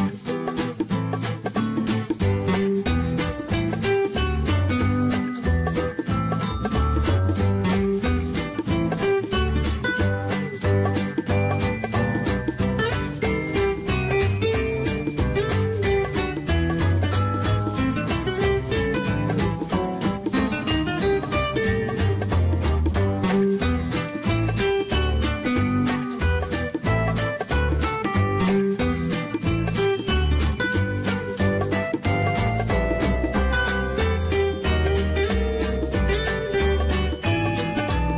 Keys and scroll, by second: 4.2 Escape, 7.7-9.5 typing, 16.8 Escape.